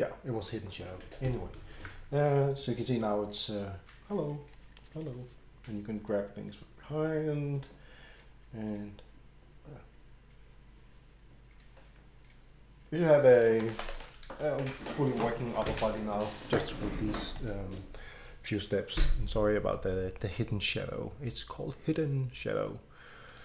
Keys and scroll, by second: 17.4 Escape.